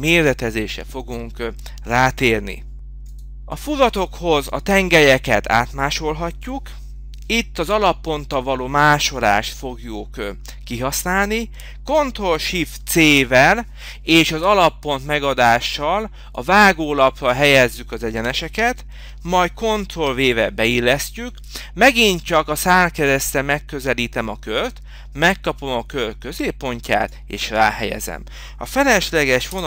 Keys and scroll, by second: 0.0 Return, 2.3 ctrl+v, 4.7 m, 6.0 Return, 11.4 Return, 12.3 h, 14.2 Return, 16.9 Return.